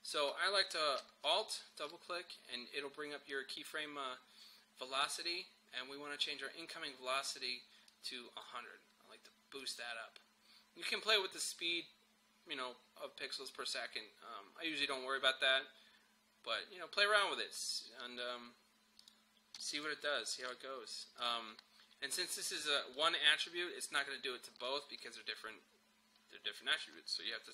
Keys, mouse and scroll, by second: 1.0 alt+space, 1.2-7.6 alt+drag, 7.9-9.6 drag, 17.0-19.0 drag, 19.6 0, 19.8 click.